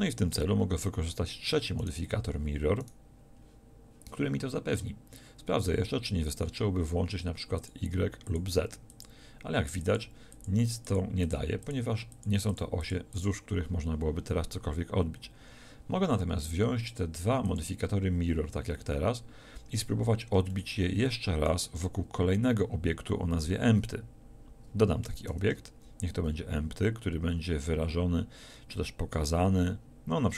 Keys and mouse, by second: 1.8-5.7 middle drag, 7.6-16.0 middle drag, 16.9-19.8 middle drag, 25.3 shift+a.